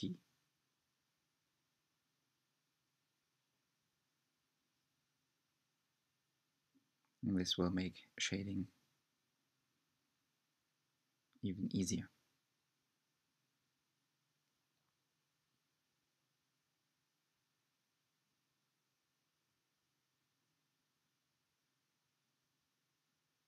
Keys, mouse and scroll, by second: 0.3 right click, 0.8-3.2 middle drag, 3.2 click, 3.7 shift+click, 4.3 shift+click, 5.1 shift+click, 5.7 shift+click, 6.5 shift+click, 7.1 shift+click, 8.9-10.0 right drag, 10.0 a, 12.3 u, 14.7 3, 15.1 click, 15.6 shift+click, 16.1 shift+click, 16.6 shift+click, 17.2 shift+click, 18.4 shift+click, 20.6 a, 22.2 g.